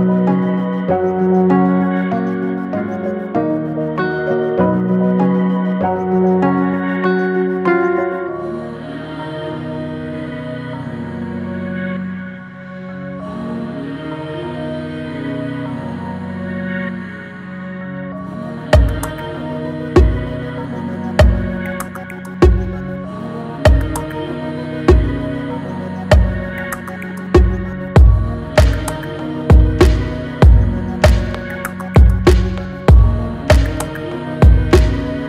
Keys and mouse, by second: 5.6-6.2 ctrl+drag, 6.9 click, 8.4 ctrl+d, 9.8 shift+d, 12.2 click, 13.6 shift+d, 14.8 ctrl+d, 16.0-18.7 drag, 22.2 click, 27.4 click, 31.3-34.0 drag, 32.9 KP_0.